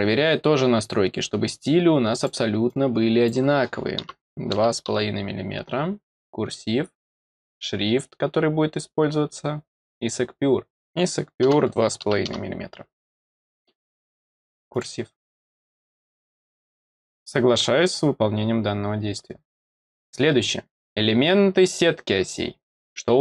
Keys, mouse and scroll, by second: 2.1 click, 2.6 click, 6.1 click, 7.0 click, 8.0-8.9 scroll down 8, 9.4-10.5 scroll down 8, 14.6 click, 17.8 click, 20.1-20.5 scroll down 1, 20.7 click.